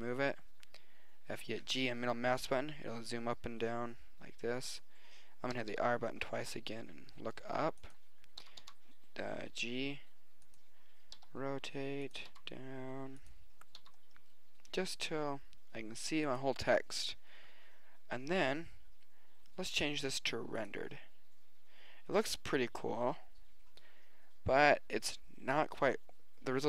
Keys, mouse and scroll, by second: 5.5 r, 8.5 g, 11.3 r, 12.3 g, 13.8 g.